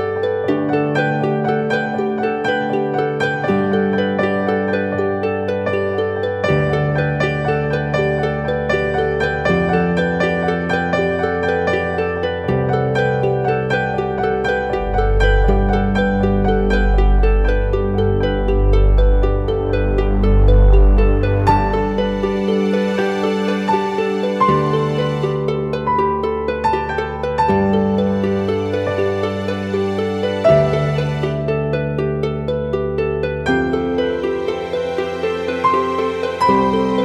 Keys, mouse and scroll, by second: 11.2 double click, 33.7-36.2 scroll down 1.